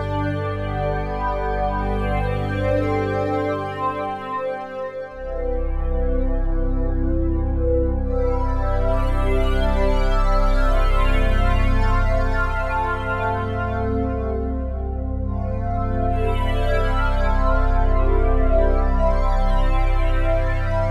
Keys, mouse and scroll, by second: 1.2-3.3 drag, 2.0 super+d, 3.6-10.8 drag, 11.4-13.8 alt+shift+drag, 17.1 click, 18.7 click, 20.4-20.9 alt+shift+drag.